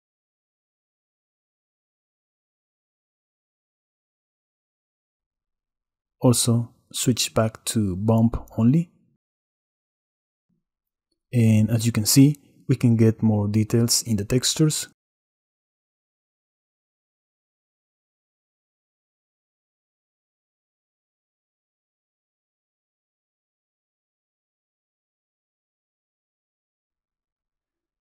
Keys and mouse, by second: 3.2 click, 4.8 middle click, 7.7-9.2 middle drag, 9.2 middle click, 13.0 click, 13.6 drag, 13.7-15.0 middle drag, 17.5-20.2 drag, 20.3 middle click, 20.9-22.5 middle drag, 22.5 click, 22.7-23.4 middle drag, 24.8-26.8 middle drag, 27.0 click, 27.3 middle click, 27.5 middle click.